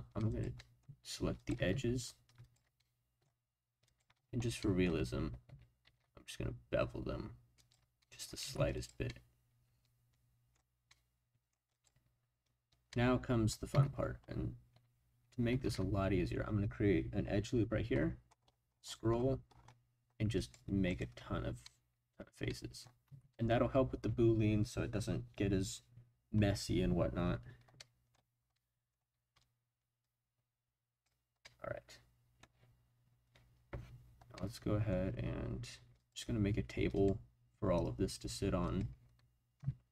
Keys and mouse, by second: 0.3 click, 0.6 shift+middle click, 1.4 shift+click, 1.5 shift+middle click, 2.8 middle click, 3.8 shift+click, 4.6 middle click, 5.8 ctrl+b, 7.6 click, 8.0 middle click, 8.4 Tab, 9.1-11.8 middle drag, 12.9-13.5 middle drag, 13.7 Tab, 15.6 ctrl+r, 20.9 click, 21.6 middle click, 22.5 middle click, 23.0 Tab, 23.3 middle drag, 27.7-28.1 middle drag, 28.5-29.0 middle drag, 30.0-31.0 drag, 31.4-32.4 middle drag, 34.3 middle click, 36.0-38.8 drag, 39.6 s.